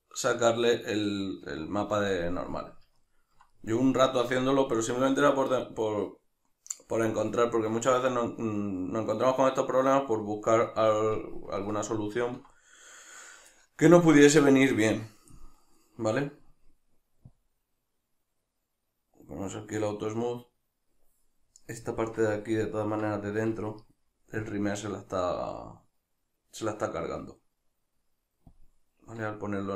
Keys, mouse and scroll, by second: 15.3-21.5 drag, 21.5-26.7 middle drag, 26.7-29.7 drag.